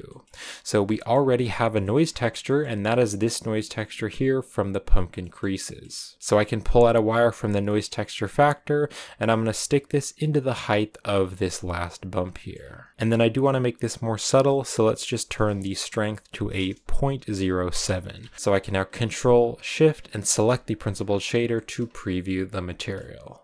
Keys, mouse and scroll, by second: 3.1-11.0 drag, 11.7 click, 12.6 scroll up 4, 17.7 Left, 18.3-20.3 middle drag, 20.3 ctrl+shift+click, 20.9 scroll down 6, 21.4 shift+middle click, 22.1-22.4 scroll down 1, 22.6 shift+middle click.